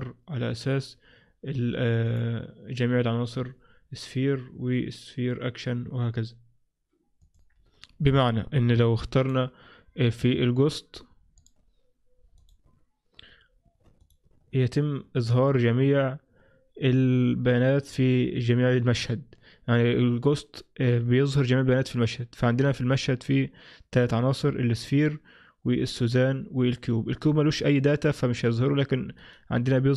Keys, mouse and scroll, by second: 2.1 click, 9.3 click, 11.5 click, 14.1 click, 29.3 right click.